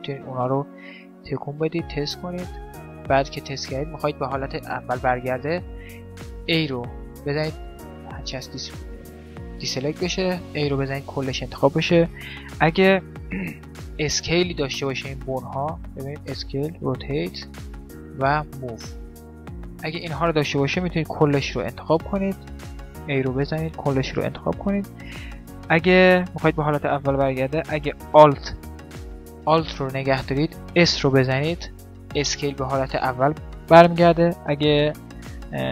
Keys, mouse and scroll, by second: 0.3 click, 0.7 g, 1.3 right click, 2.4 right click, 2.5 g, 3.2 click, 4.3 middle click, 5.9-7.7 middle drag, 6.2 a, 10.3 a, 14.5 s, 16.7 r, 18.1 g, 19.1-21.1 middle drag, 21.1 a, 21.3 a, 22.6 a, 23.1 a, 30.9 alt+s.